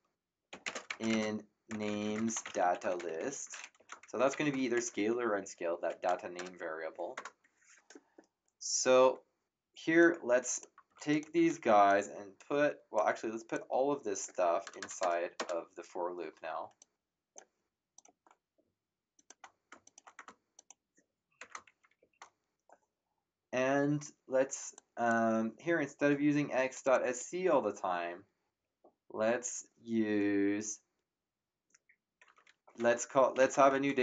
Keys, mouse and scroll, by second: 0.0-3.7 typing, 3.7 End, 4.7 Return, 6.3 BackSpace, 7.1 Tab, 10.0 click, 10.8 ctrl+x, 11.1 click, 11.3 ctrl+v, 11.8 click, 13.5 click, 14.6 BackSpace, 16.8 click, 17.9 click, 19.1 shift+click, 19.8 click, 20.1 Tab, 20.5 click, 21.4 Return, 24.7 click, 26.7 click, 33.1-34.0 typing.